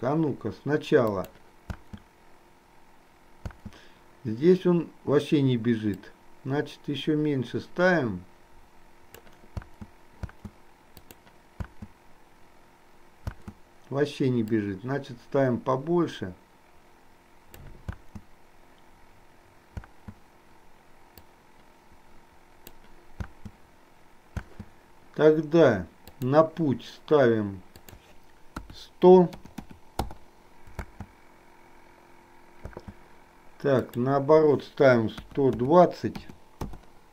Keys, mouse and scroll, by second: 1.1 click, 6.0-9.3 drag, 6.0 space, 9.5 space, 11.0 click, 11.0 space, 14.5-17.8 drag, 14.5 space, 18.0 space, 21.3-22.8 drag, 23.4 space, 26.1 click, 27.8-30.1 drag, 29.6 KP_0, 30.9 space, 33.9-36.8 drag, 33.9 space.